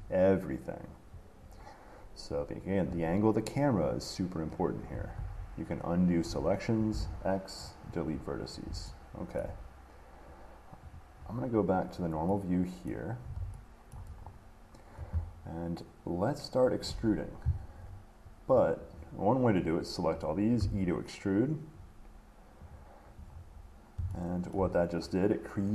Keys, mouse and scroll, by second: 0.0 shift+middle click, 1.8 middle click, 1.8 middle click, 2.7 middle click, 3.9 middle click, 5.4 ctrl+z, 6.7 middle click, 7.0 middle click, 7.1 x, 7.9 click, 9.6 shift+middle click, 11.1 click, 13.1 middle click, 14.1 middle click, 14.4 middle click, 14.5 middle click, 14.6 middle click, 14.9 middle click, 15.5 middle click, 19.7 click, 22.9 click, 23.5-23.9 scroll, 24.7 shift+middle click.